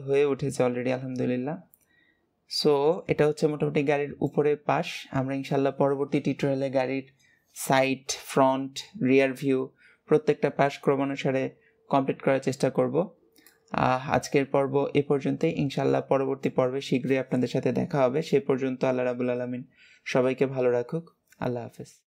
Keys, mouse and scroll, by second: 13.2-16.3 middle drag.